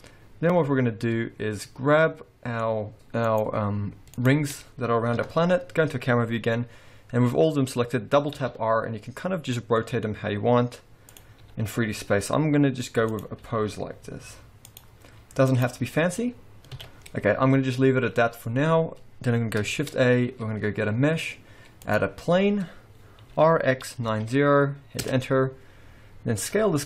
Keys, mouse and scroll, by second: 2.1 middle click, 2.9 shift+click, 3.3 click, 5.2 KP_0, 8.4 r, 11.4 r, 13.5 r, 15.1 r, 16.8 alt+a, 17.1-18.3 scroll up 2, 18.6 scroll down 2, 19.8 shift+a, 23.3 r, 26.0-26.5 scroll down 3, 26.5 s.